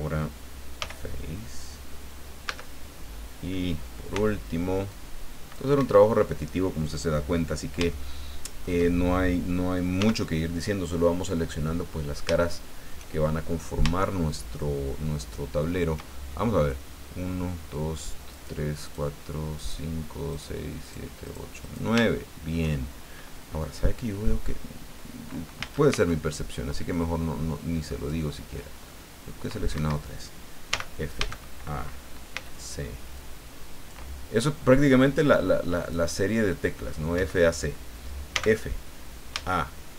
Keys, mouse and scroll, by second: 0.8 f, 2.4 a, 4.1 c, 4.9 click, 5.7 Escape, 7.9 shift+middle click, 10.0 f, 12.0-12.3 scroll down 2, 12.4 shift+middle click, 14.0-16.1 shift+middle drag, 18.3 right click, 18.8 right click, 19.5 right click, 20.3 right click, 20.8 right click, 21.2 click, 21.6 right click, 22.0 shift+middle click, 25.6 a, 25.9 c, 26.9-28.3 drag, 28.8 middle click, 29.7 Escape, 30.7 f, 31.2 a, 32.3 c, 33.1 click, 34.4 middle click, 35.8 click, 36.7 middle click, 37.1 Escape, 38.3 f, 39.3 a.